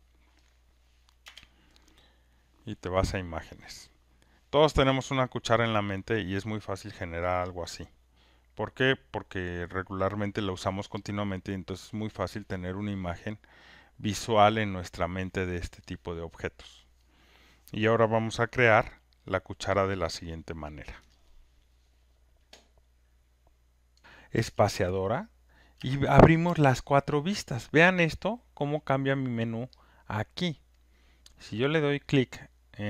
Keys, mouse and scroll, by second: 1.2 Return, 3.3 click, 4.6-8.2 drag, 14.2-19.3 drag, 24.0-25.6 alt+right drag, 25.7 space, 29.0 space, 29.8 click, 31.0 click, 31.4 click, 31.8 click.